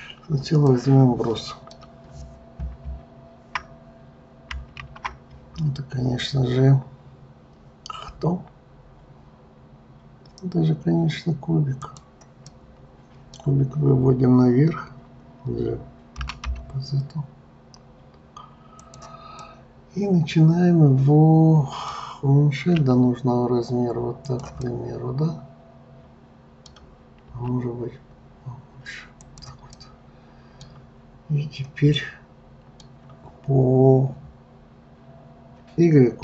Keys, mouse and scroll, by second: 0.0-0.7 scroll down 1, 0.7-3.8 middle drag, 4.8 shift+a, 12.5-15.5 middle drag, 16.2 g, 19.4-22.5 middle drag, 22.8 s, 24.7-27.3 middle drag, 27.3 s, 29.7-35.0 middle drag.